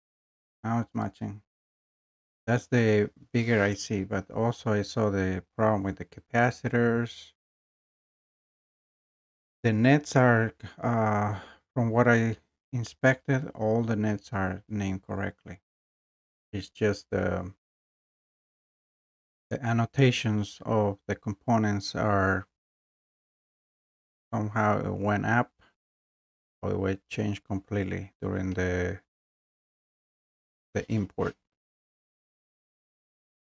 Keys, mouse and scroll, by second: 1.0 click, 5.7 scroll, 13.5 scroll, 14.7-15.2 scroll, 18.3 scroll, 19.7 scroll, 20.4 scroll, 21.1 scroll, 24.9 scroll down 2.